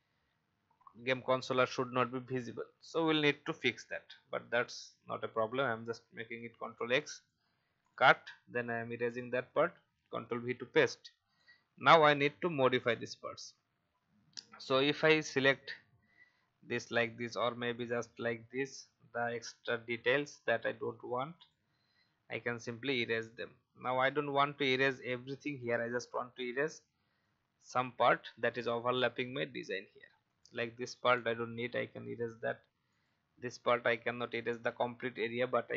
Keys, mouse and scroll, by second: 2.8 alt+scroll down 1, 4.6 click, 6.4 ctrl+x, 6.9 click, 8.9 Delete, 9.4 ctrl+v, 10.9 click, 11.9 alt+scroll up 1, 13.0 click, 16.8 alt+scroll up 1, 17.7 click, 18.5 Delete, 20.5 click, 20.6 Delete, 21.3-22.4 drag, 21.6 Delete, 23.1 click, 25.3 shift+e, 26.4 click, 27.8 v, 28.5 click, 29.1-30.2 scroll up 1, 30.2 click, 31.6 Delete, 32.9 click, 35.1 shift+e.